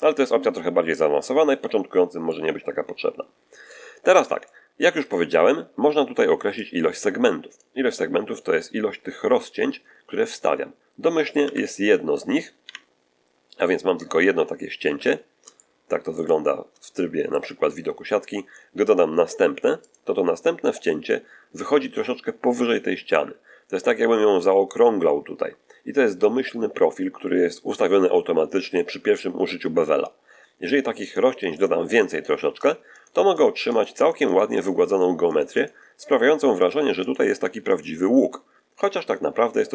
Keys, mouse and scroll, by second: 2.1-3.8 middle drag, 4.1 middle click, 4.7 middle click, 6.5-7.6 drag, 11.3 1, 12.5 3, 14.7 z, 15.3 shift+z, 15.4 shift+middle click, 16.2-16.7 shift+scroll up 2, 16.7 shift+middle click, 19.7 click, 30.9 click, 31.4 click, 32.0 click, 32.5 click, 32.8 click, 33.2 click, 33.6-34.7 drag, 35.2 click, 35.9 click, 36.5 click, 36.9 click, 37.6 click, 39.6-39.7 middle drag.